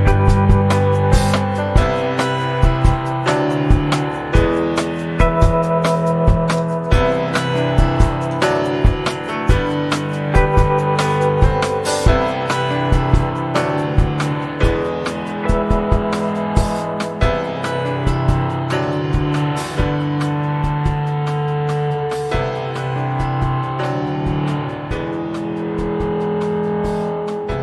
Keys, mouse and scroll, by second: 0.0 shift+click, 1.3-2.3 middle drag, 2.3 click, 4.3 click, 4.7-6.5 middle drag, 6.5 click, 6.6 scroll down 1, 6.9 middle click, 7.9 click, 9.7 click, 10.6 click, 13.2-13.5 scroll down 1, 13.5-16.0 middle drag, 16.0 scroll up 1, 16.1 shift+middle click, 16.5 click, 16.9-18.3 middle drag, 18.3 i, 20.4 middle click, 21.2 e, 22.9 click, 23.3 middle click, 23.8 click, 24.2 middle click, 24.9 click, 27.0 middle click, 27.4 click.